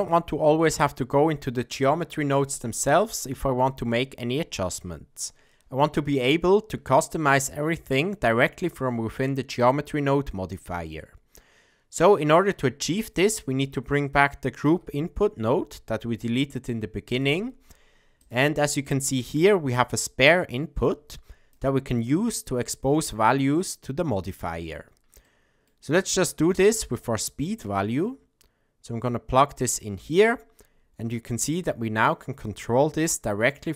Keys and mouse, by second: 0.0 click, 12.3 middle click, 14.6 shift+a, 18.9 middle click, 19.9-21.5 drag, 25.3 middle click, 28.0-30.2 drag.